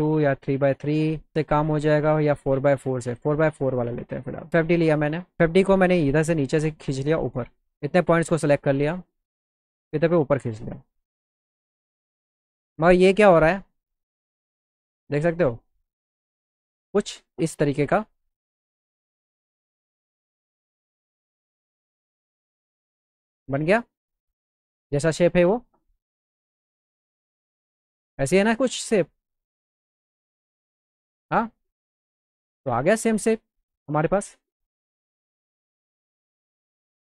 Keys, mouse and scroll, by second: 3.2 click, 5.4-8.4 drag, 9.2-15.1 drag, 17.4-19.7 alt+middle drag, 22.8-25.1 alt+middle drag, 26.9-29.2 drag, 32.2 click, 32.7 click.